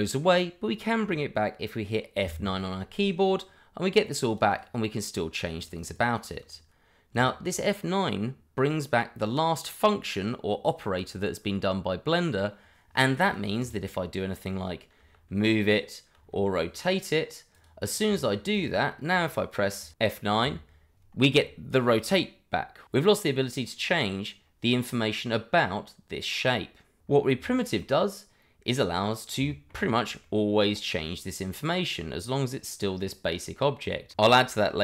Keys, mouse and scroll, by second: 3.0 F9, 4.3 click, 4.6 double click, 5.6 click, 5.8 double click, 7.1 click, 13.2 click, 13.7 double click, 14.0 middle click, 15.0 g, 15.6 click, 16.2 r, 17.5 click, 18.1 shift+middle click, 19.0 middle click, 19.8 click, 20.4 F9, 22.0 click, 24.9 middle click, 27.8 middle click, 29.5 shift+middle click, 29.8-30.2 scroll up 1, 30.2 middle click, 30.9-33.0 scroll down 1, 33.0 middle click.